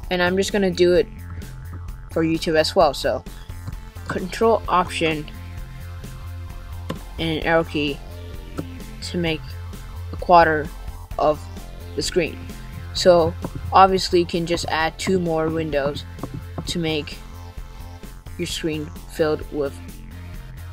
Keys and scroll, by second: 4.9 ctrl+alt+Down.